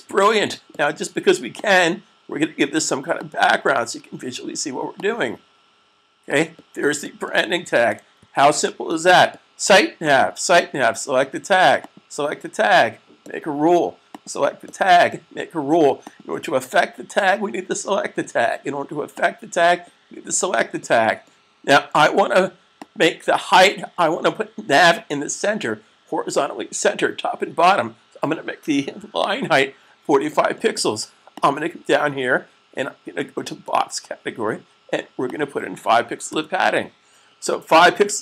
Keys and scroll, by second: 8.1 super+s, 29.9 typing, 35.9 5.